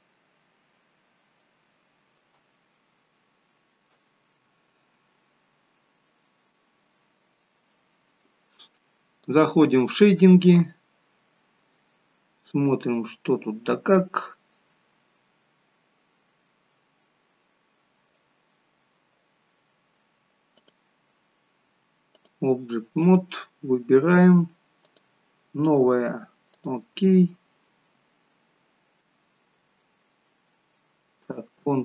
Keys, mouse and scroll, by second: 1.3 alt+shift+right click, 3.0 alt+shift+middle click, 5.1-5.5 scroll down 1, 5.5-5.9 scroll up 1, 5.9-6.3 scroll down 1, 11.8 scroll down 1, 17.4 scroll up 1, 27.4-29.2 scroll down 1, 29.8-30.4 scroll down 1, 30.4-31.8 scroll up 1.